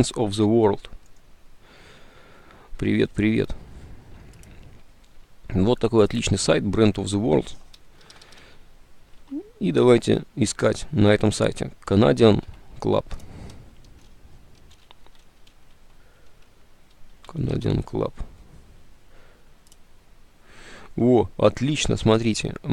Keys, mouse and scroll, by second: 8.1 BackSpace, 9.3 alt+Tab, 9.4 BackSpace, 12.6 Tab, 14.4-16.4 typing, 17.6 Return.